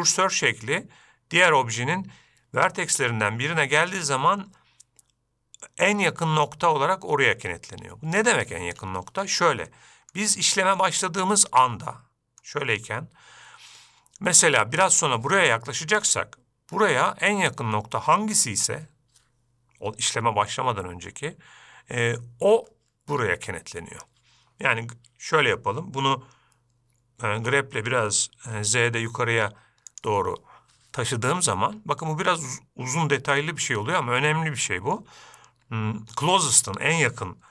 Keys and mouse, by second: 10.1 middle click, 10.8-11.2 shift+middle drag, 11.6-12.8 middle drag, 27.8 g.